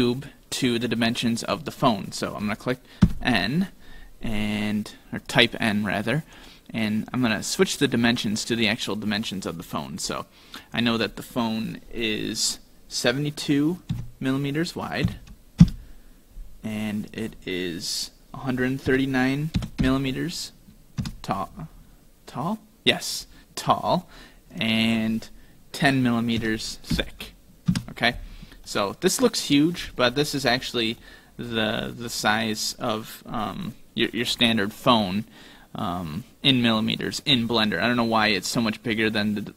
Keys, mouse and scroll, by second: 3.0 n, 5.3 click, 10.6 click, 17.1 click, 22.4-23.9 scroll down 7, 23.9-24.5 scroll down 1, 24.5 click, 24.5-27.2 scroll down 1, 28.7 middle click, 30.1-31.5 scroll down 6, 31.0 middle click, 31.8-32.1 scroll up 4, 32.2-32.7 scroll down 2, 34.3 middle click.